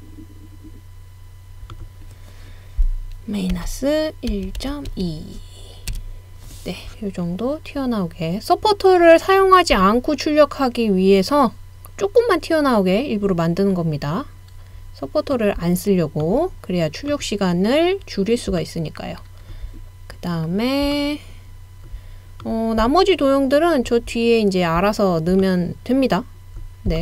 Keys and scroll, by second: 3.6-5.4 typing, 5.9 Return, 11.0 typing, 12.2 typing, 13.4 typing.